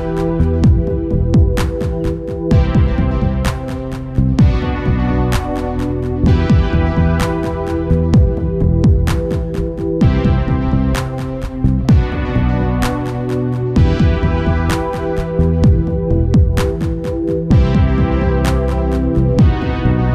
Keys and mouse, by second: 1.0-2.7 drag, 2.7 middle click, 3.1-4.7 drag, 4.7 middle click, 7.7-9.5 drag, 9.5 middle click, 11.4 KP_0, 12.4 shift+f, 17.1-20.1 drag.